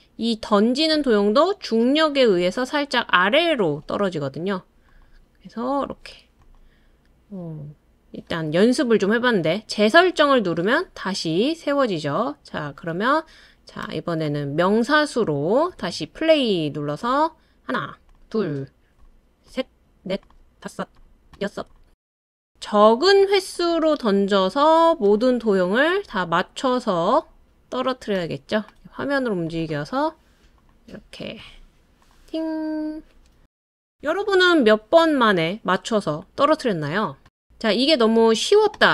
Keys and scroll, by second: 15.8 space.